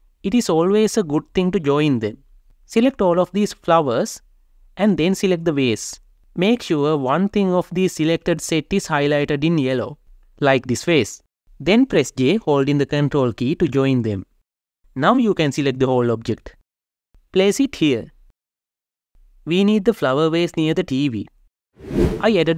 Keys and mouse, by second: 2.6-3.2 drag, 4.6 shift+click, 5.9 g, 6.5 Escape, 12.4 ctrl+j, 13.6 click, 15.1 g, 15.6 Escape, 16.4 click, 17.3 g, 17.5 shift+z, 19.0 g, 19.2 z, 20.4 click, 22.2 r.